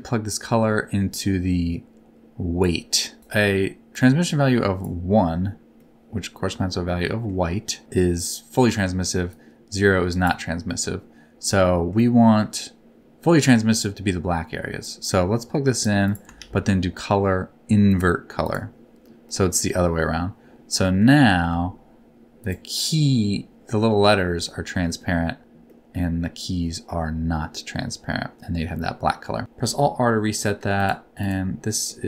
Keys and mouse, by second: 4.0 click, 5.8-7.3 middle drag, 9.3 click, 10.7 middle click, 11.7 middle click, 14.8-15.8 drag, 16.0 click, 16.3 shift+a, 19.3-20.8 middle drag, 22.0 r, 22.3 click, 24.5 middle click, 25.7-26.9 middle drag, 27.4-29.0 middle drag, 29.7 alt+r, 31.8 middle click.